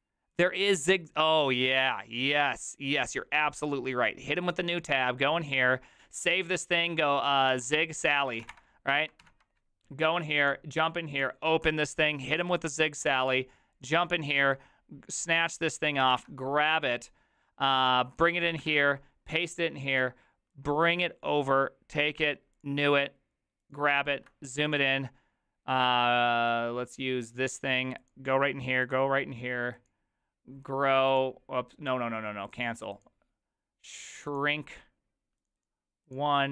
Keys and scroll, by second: 7.3-9.0 typing, 9.2 alt+=, 16.1 ctrl+c, 18.6 ctrl+v.